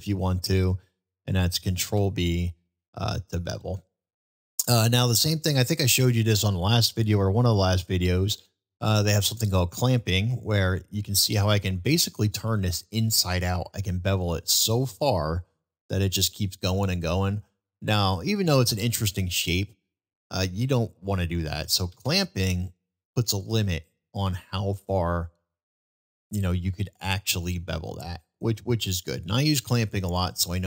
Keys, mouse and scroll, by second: 1.8 ctrl+b.